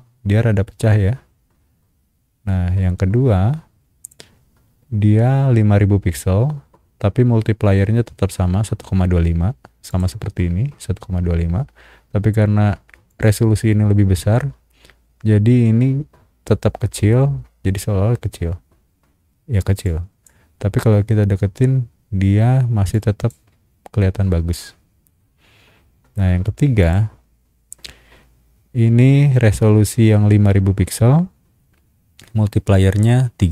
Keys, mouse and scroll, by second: 0.7 scroll down 1, 1.2-2.2 scroll down 4, 3.1 scroll down 1, 4.0 click, 9.9 click, 13.1 click, 17.5-18.0 scroll up 2, 19.1 scroll up 1, 19.8 click, 20.6-21.0 scroll up 2, 22.3 scroll down 1, 22.9 click, 24.5-26.2 scroll down 6, 26.8 click.